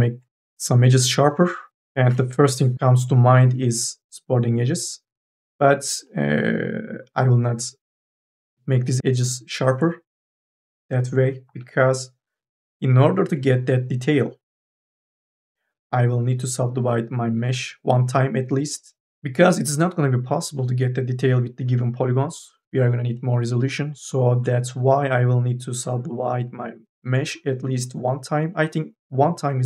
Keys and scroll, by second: 1.2 q, 2.7 k, 2.7 l, 4.4 q, 11.3 ctrl+z.